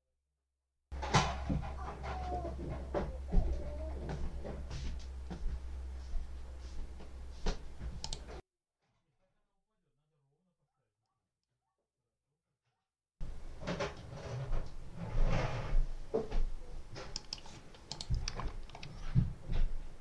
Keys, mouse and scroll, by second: 7.9 click, 10.9 middle click, 17.0 middle click, 17.8 click, 18.9-20.0 ctrl+scroll up 8.